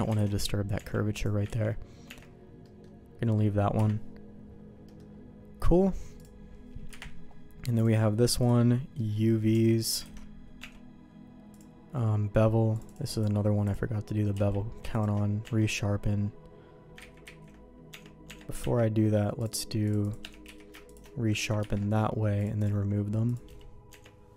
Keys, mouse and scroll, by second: 0.1 alt+a, 0.7 Tab, 1.1 click, 1.6 ctrl+e, 2.0 Tab, 2.6 middle click, 3.7 KP_Divide, 4.9 middle click, 6.2 click, 7.8 KP_Divide, 8.9 middle click, 9.5 Tab, 10.0 alt+a, 10.6 Tab, 11.5 click, 12.7 click, 13.1-14.3 drag, 14.3 q, 15.4 Tab, 17.0 ctrl+z, 17.3 ctrl+z, 17.9 Tab, 18.2 Tab, 18.6 ctrl+`, 20.4 q, 21.6 ctrl+`, 23.9 Tab.